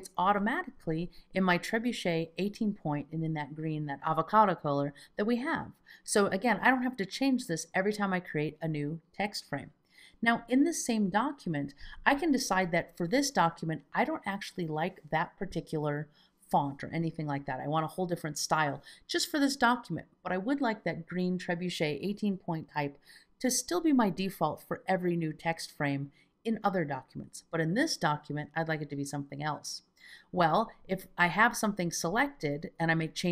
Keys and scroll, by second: 13.6 shift+super+p.